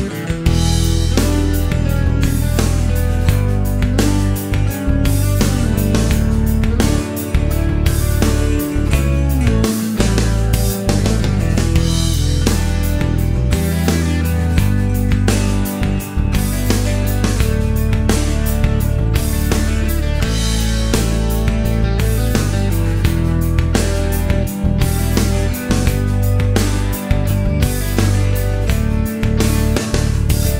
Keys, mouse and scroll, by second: 0.4 click, 1.9 shift+v, 3.8-5.5 typing, 7.9-11.1 drag, 12.2 click, 13.2 shift+v, 15.4 1, 15.6 Return, 17.5-20.6 drag, 21.7 click, 22.4-23.4 middle drag, 24.0-25.5 typing, 25.6 shift+Return, 26.7 middle click, 29.3 click.